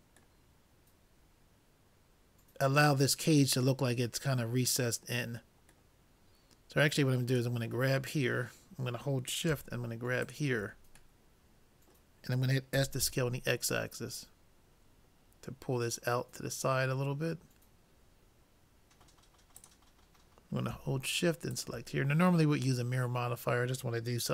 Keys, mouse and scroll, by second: 0.4-2.5 middle drag, 3.9-5.9 middle drag, 6.0-9.9 middle drag, 7.3-9.0 drag, 10.3-11.9 drag, 11.3 middle click, 12.9 s, 17.2-18.9 middle drag, 19.6-21.3 drag, 21.5 click, 22.1 middle click, 22.5-23.5 drag.